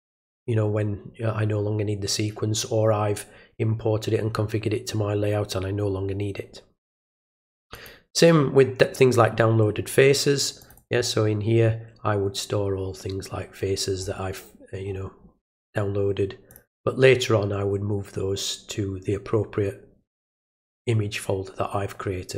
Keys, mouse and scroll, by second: 7.8 click, 10.6 click, 10.8 click, 12.9-13.9 scroll down 1, 14.0 scroll down 2, 14.9-15.4 scroll down 1, 16.5 click.